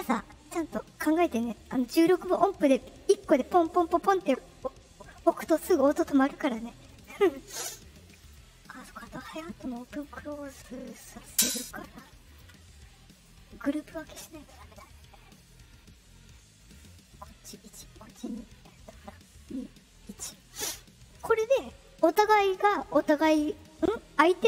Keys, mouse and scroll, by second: 6.8 click, 8.2 click, 9.3 click, 11.2 ctrl+click, 12.2 click, 13.2 click.